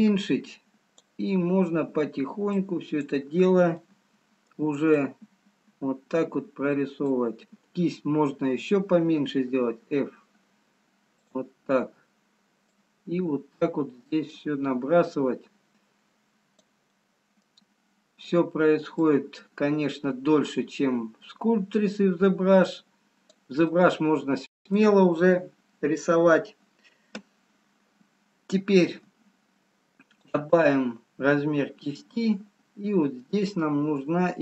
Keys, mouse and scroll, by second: 2.6 click, 4.6 middle click, 13.0 click, 17.0 middle click, 19.3 click, 24.1 middle click, 31.3-31.7 scroll up 2, 31.9 click.